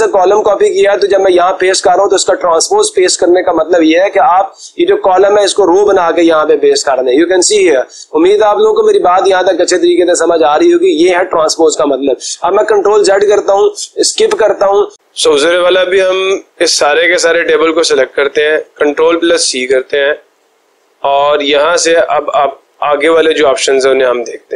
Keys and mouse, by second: 9.0-10.0 drag, 12.9 ctrl+z, 14.2 Escape, 17.7-18.8 drag, 19.5 ctrl+c, 22.2-23.3 drag.